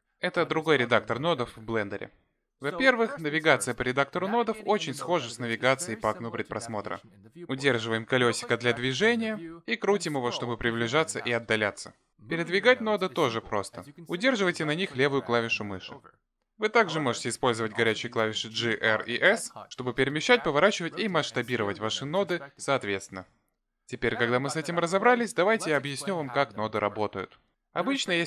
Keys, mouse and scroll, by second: 6.0 middle click, 8.4 middle click, 10.6-11.4 scroll down 6, 11.4-11.8 scroll up 4, 11.8 scroll down 1, 11.9-12.4 scroll down 5, 12.3-13.4 scroll up 4, 13.4 scroll up 2, 13.6 click, 14.4 click, 19.2 click, 20.4 shift+click, 20.9 g, 21.9 r, 23.3 s.